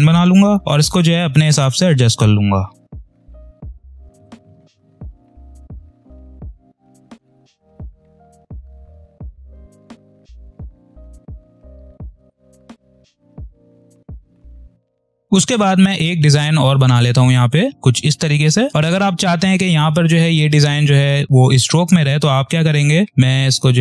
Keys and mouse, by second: 3.5 ctrl+click, 3.9 space, 3.9 click, 4.0 space, 4.2 ctrl+click, 5.1 ctrl+z, 5.2 ctrl+click, 6.4-8.2 ctrl+drag, 8.2 ctrl+z, 8.5 ctrl+click, 9.3-11.1 typing, 9.3 click, 10.0 click, 10.4 ctrl+click, 11.0 click, 12.2 ctrl+click, 13.4 space, 13.4 click, 13.5 space, 13.9 ctrl+click, 15.0 space, 15.1 click, 15.1 space, 16.7 click, 18.6 space.